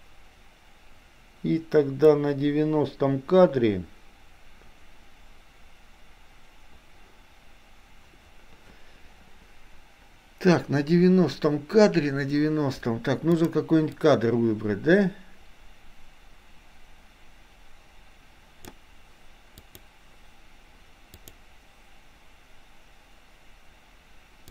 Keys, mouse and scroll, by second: 13.4 click, 14.0-18.9 drag, 19.7 click, 21.4 click.